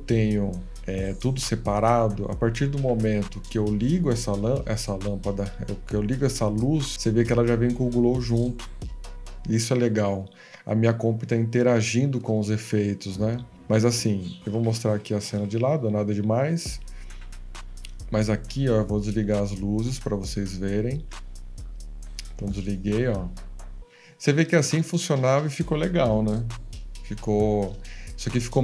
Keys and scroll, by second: 14.6 Escape, 16.9 Escape, 17.7 7, 21.1 F18.